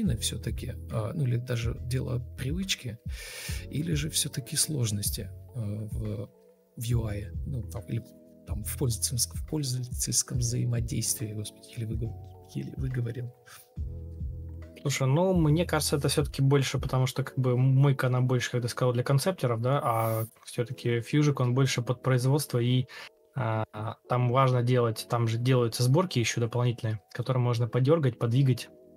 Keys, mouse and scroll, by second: 3.8 ctrl+space, 5.3 ctrl+space, 7.0 ctrl+v, 9.9 ctrl+space, 12.2 ctrl+space, 13.8 ctrl+space, 14.7 Escape, 17.0 Escape, 17.3 ctrl+space, 19.7 ctrl+z, 20.1 ctrl+space, 22.1 Escape, 25.0 ctrl+space.